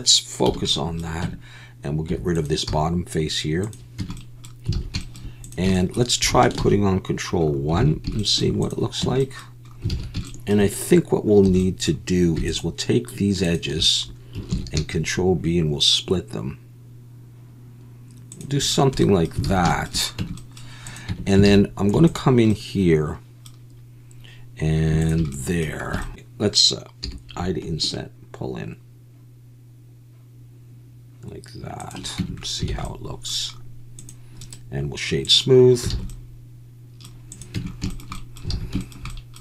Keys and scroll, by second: 1.2 Tab, 2.1 3, 2.7 x, 4.0 Tab, 4.7 alt+a, 6.8 ctrl+1, 7.8 alt+a, 9.0 Tab, 9.9 alt+a, 11.5 2, 14.6 ctrl+b, 19.5 alt+a, 20.2 Tab, 21.1 Tab, 21.5 alt+a, 21.9 3, 26.1 Escape, 26.1 s, 27.2 i, 32.2 Tab, 32.7 alt+a, 35.9 alt+a, 37.6 Tab, 38.6 alt+a.